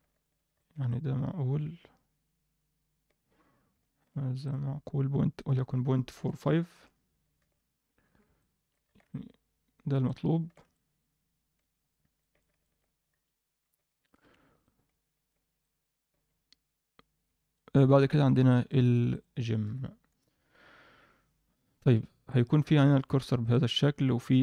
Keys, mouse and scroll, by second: 0.2 shift+middle click, 0.5 ctrl+alt+middle click, 0.8-3.1 alt+middle drag, 3.7 ctrl+alt+middle drag, 4.4 click, 5.3-6.7 drag, 7.4 alt+a, 7.8-8.2 scroll down 1, 8.3-8.7 alt+middle drag, 8.8 alt+a, 9.0-10.0 middle drag, 10.2 scroll down 1, 10.4 alt+a, 10.7-11.7 middle drag, 11.8 click, 12.2 alt+middle click, 12.6 ctrl+middle drag, 13.2 ctrl+s, 13.9 alt+shift+middle drag, 14.6-15.2 middle drag, 15.6 alt+middle click, 17.5 middle click, 18.1 alt+shift+middle click, 18.4 alt+middle click, 19.1 click, 19.6 KP_7, 20.5 ctrl+s, 21.8 Tab, 22.2 click, 22.8 shift+s, 23.6 Tab.